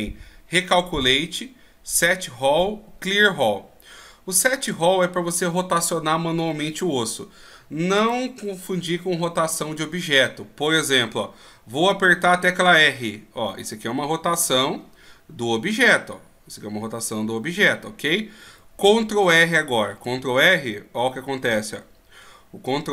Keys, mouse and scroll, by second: 8.0 right click, 12.2 r, 19.9 ctrl+r.